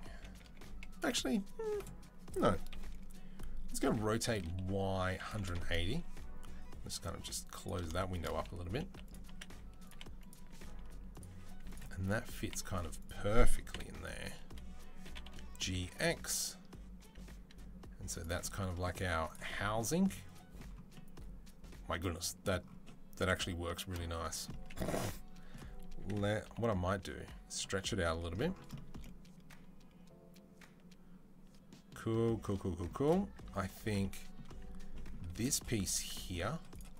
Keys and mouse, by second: 2.5 KP_3, 3.7 r, 6.8-8.9 drag, 8.5-12.2 typing, 8.9-28.5 middle drag, 13.5 KP_7, 14.9 g, 18.8 z, 25.8 s, 28.5 shift+click, 28.8-36.5 middle drag, 33.6 Tab, 34.5 Tab, 35.8 Tab, 36.5 click, 36.6-36.9 middle drag.